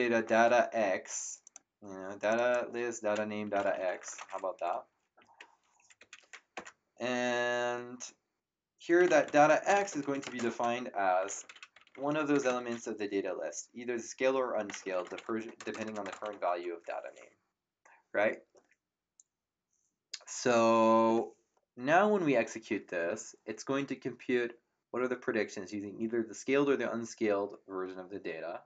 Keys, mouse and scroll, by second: 0.0-0.6 typing, 1.4 click, 3.2-4.6 typing, 5.1 Down, 5.7 Up, 5.9 End, 6.5 Return, 6.5 KP_Enter, 8.7-12.4 typing, 14.4-16.8 typing.